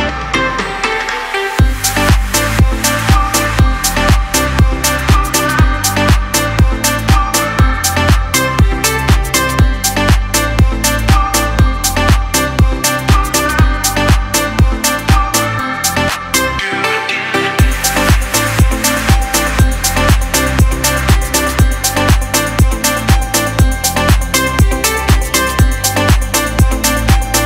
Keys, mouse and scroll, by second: 10.0 Right, 12.5 click, 12.5 click, 13.2 space, 13.3 click, 13.7 space, 14.6 click, 15.3 Up, 16.5 click, 16.8 alt+scroll down 1, 17.4-17.9 typing, 17.5 click, 19.2 alt+scroll up 1, 19.7-20.6 typing, 20.1 click, 24.0-27.4 drag.